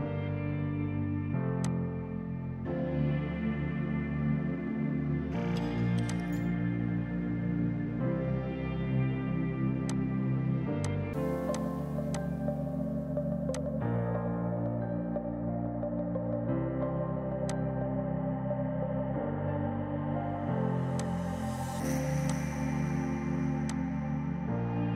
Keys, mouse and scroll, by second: 6.1 click, 9.9 click, 17.5 click, 20.1 z, 20.7 space, 21.1 click.